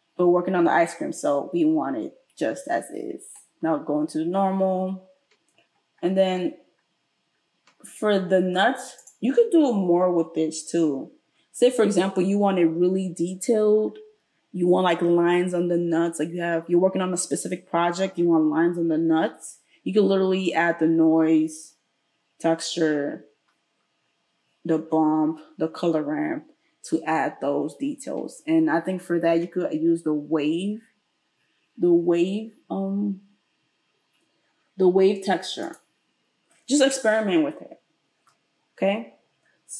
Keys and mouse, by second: 29.3 space.